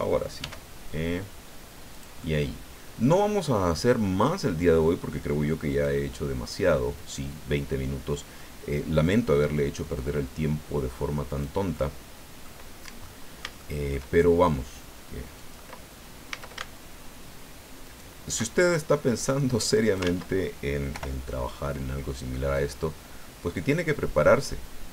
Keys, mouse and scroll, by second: 0.4 e, 1.9-3.2 drag, 2.2-3.2 right drag, 5.7 click, 6.9 click, 9.0-11.6 drag, 11.7 middle click, 12.6 scroll down 1, 12.8-14.1 middle drag, 14.2 shift+scroll up 1, 15.4 click, 16.3 a, 17.8 alt+shift+right click, 19.2 click, 20.0 ctrl+z, 20.9 o, 22.5 click, 23.2-23.9 scroll down 3, 24.8-24.9 scroll down 2.